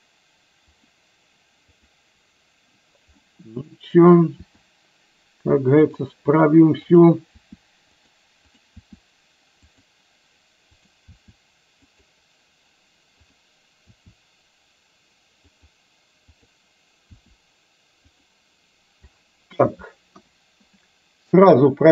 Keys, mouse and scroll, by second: 1.9 click, 3.4 middle click, 4.6 r, 7.1 click, 7.5 r, 9.0 r, 11.2 r, 13.2 click, 14.1 r, 16.5 click, 17.2 r, 20.2 KP_1.